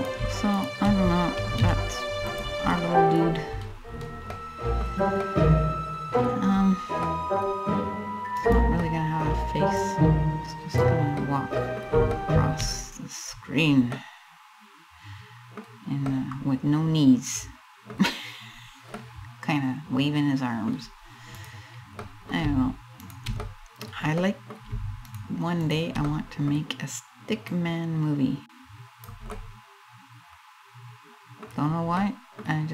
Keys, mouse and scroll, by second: 0.2 shift+right click, 1.2 alt+m, 2.3 middle click, 2.8-3.9 scroll down 10, 3.9 middle click, 4.8 middle click, 6.2 scroll down 3, 6.7 middle click, 8.0 right click, 8.5 middle click, 9.4 click, 10.4 click, 10.8 middle click, 11.8 shift+middle click, 12.4 scroll up 1, 12.8-13.3 scroll down 2, 13.6 middle click, 15.0 middle click, 15.7 middle click, 17.6 scroll up 1, 18.1-18.5 scroll up 1, 18.5 middle click, 20.1 middle click, 21.0 right click, 21.7 middle click, 22.7 shift+right click, 23.1 middle click, 23.8 middle click, 24.7 shift+right click, 25.3 shift+right click, 25.7 middle click, 27.1 click, 28.9 middle click, 31.1-31.6 scroll down 2, 31.6 middle click, 32.1-32.6 scroll up 1, 32.6 middle click.